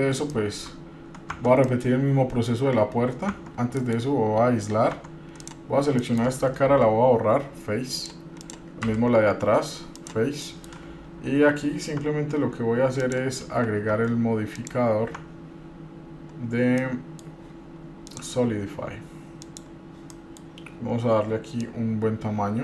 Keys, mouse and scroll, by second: 0.2 scroll down 1, 0.5 shift+middle click, 1.6 Tab, 1.9 middle click, 3.5 Tab, 4.0 KP_Divide, 4.5-5.1 scroll down 2, 5.2 Tab, 5.6 click, 6.2 middle click, 6.8 Delete, 8.6 click, 9.0 Delete, 10.6 middle click, 11.3 Tab, 12.1 Tab, 13.2 click, 14.1 Tab, 14.7 click, 15.4 Tab, 16.9 scroll down 1, 17.0 middle click, 18.3-19.9 drag, 20.3 middle click, 21.8-22.6 drag.